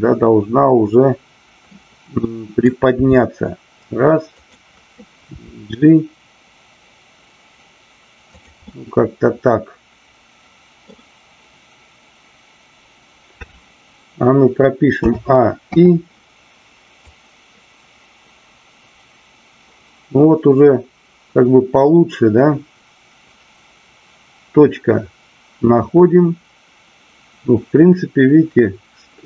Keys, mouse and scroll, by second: 0.1-1.6 middle drag, 2.2 middle click, 2.8 r, 4.3 click, 5.3 g, 8.5 drag, 8.7-10.8 middle drag, 17.0-29.2 drag.